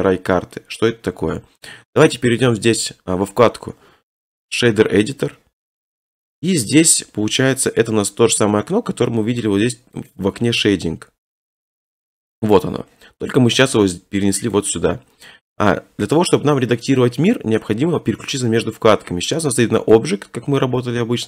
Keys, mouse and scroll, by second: 2.1 right click, 5.0 right click, 6.6 n, 8.4 right click, 8.8 scroll, 10.1 click, 14.6 click, 19.9 click.